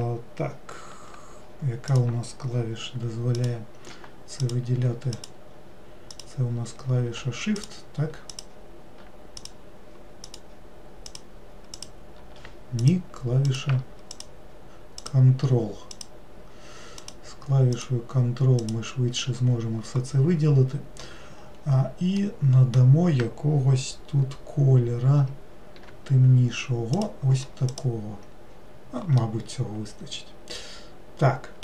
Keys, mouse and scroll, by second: 1.9 click, 3.3 click, 4.4 shift+click, 5.2 shift+click, 6.1 shift+click, 7.6 click, 8.3 shift+click, 9.4 shift+click, 10.3 shift+click, 11.1 shift+click, 11.8 shift+click, 12.8 click, 13.5 click, 14.1 ctrl+click, 15.0 ctrl+click, 15.9 ctrl+click, 17.0 ctrl+click, 17.8 ctrl+click, 18.6 ctrl+click, 22.2-25.2 middle drag, 25.8 g, 27.7 click, 29.2-31.6 middle drag.